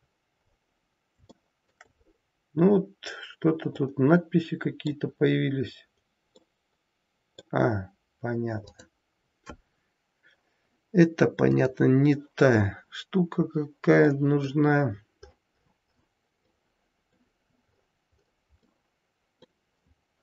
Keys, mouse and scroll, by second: 0.3 scroll down 1, 0.4-0.7 scroll up 1, 1.1 scroll up 1, 1.4 shift+middle click, 2.1-2.5 scroll up 1, 3.7 middle click, 5.2-6.5 scroll down 2, 6.5 middle click, 8.0-8.4 scroll down 2, 8.9 click.